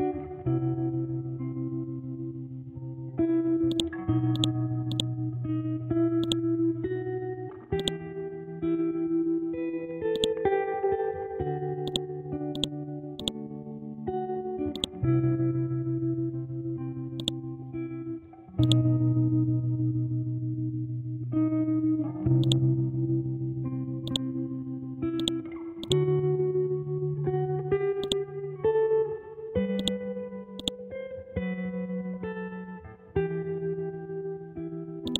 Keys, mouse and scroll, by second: 0.1 Left, 1.9 Up, 3.7 shift+click, 4.1 c, 4.3 click, 5.9 Up, 6.2 click, 6.6 scroll up 1, 7.8 ctrl+click, 11.0 scroll down 1, 11.8 click, 15.6 scroll up 1, 17.2 click, 23.2 scroll down 1, 24.0 click, 26.7 Down, 28.0 alt+click, 28.9 scroll up 1, 29.8-35.0 drag, 35.0-35.1 drag.